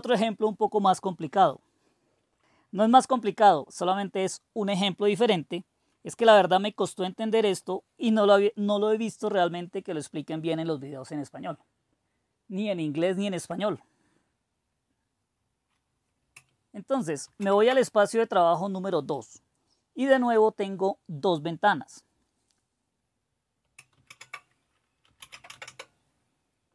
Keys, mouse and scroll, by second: 17.2 super+2, 24.0 super+d, 24.8-26.1 typing.